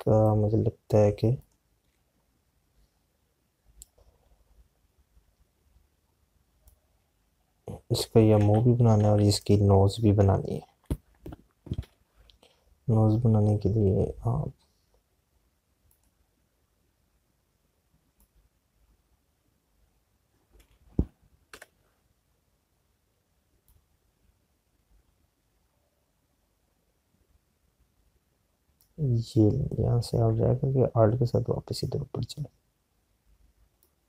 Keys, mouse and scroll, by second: 14.6 p, 27.0 click.